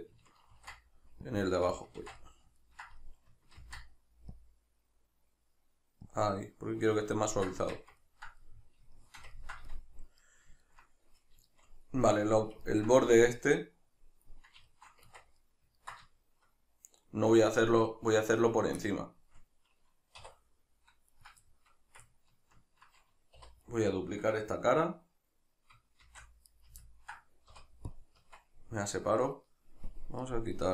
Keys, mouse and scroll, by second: 0.5 ctrl+r, 1.9 right click, 2.0 ctrl+z, 2.2-3.6 middle drag, 3.6 ctrl+r, 6.2 click, 7.2 ctrl+middle click, 7.6 Tab, 8.0 ctrl+middle click, 9.7-12.7 shift+middle drag, 15.1 Tab, 15.4 middle click, 16.1-21.1 shift+middle drag, 20.2 1, 21.1 right click, 21.5-23.6 shift+middle drag, 23.4 3, 23.6 right click, 26.0 shift+d, 26.6 right click, 26.8-29.0 ctrl+middle drag, 27.5 p, 29.0 right click, 29.8 click, 30.6 right click.